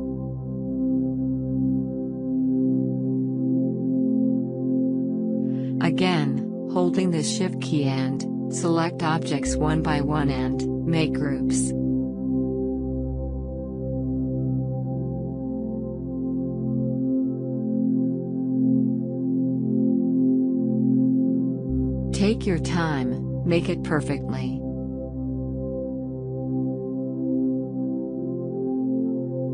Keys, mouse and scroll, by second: 1.1 shift+click, 3.8 shift+click, 4.6 right click, 5.2 click, 7.0 shift+click, 11.4 shift+click, 11.6 right click, 12.1-14.1 drag, 14.2 click, 14.9 shift+click, 15.6 right click, 16.5 click, 17.1 shift+click, 18.1 right click, 19.3 click, 20.6 click, 21.2 shift+click, 22.1 right click, 22.8 click, 24.5 shift+click, 25.7 right click, 26.3 click, 27.5 shift+click, 28.3 right click, 28.9 click.